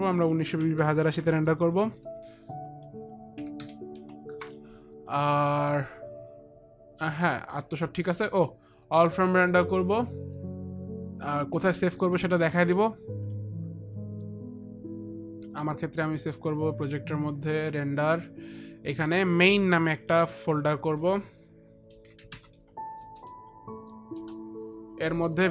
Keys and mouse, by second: 1.2 click, 1.2 KP_1, 1.6 KP_9, 2.0 KP_2, 3.2 click, 3.2 KP_1, 3.2 KP_9, 3.2 KP_2, 3.2 KP_0, 8.4 click, 8.4 KP_8, 8.5 click, 8.5 KP_0, 8.5 KP_8, 8.7 click, 8.7 KP_0, 9.0 click, 12.1 click, 16.9 click, 18.0 click, 19.4 right click, 19.4 click, 20.5 click, 20.5 right click, 22.4 m, 22.6 a, 24.7 Return, 24.7 Delete, 24.7 n, 24.7 i, 24.7 a.